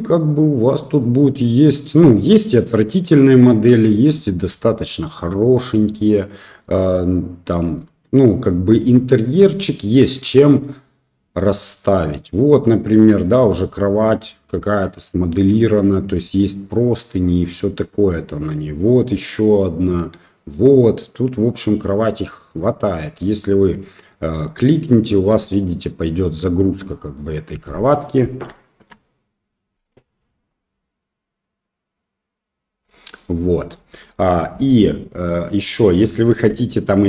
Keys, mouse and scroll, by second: 24.0-24.4 middle drag, 25.4 middle drag, 26.8-27.1 middle drag, 28.0-28.8 middle drag, 33.5 middle click, 34.0 click, 35.0 click, 36.4 Tab, 36.9 middle drag.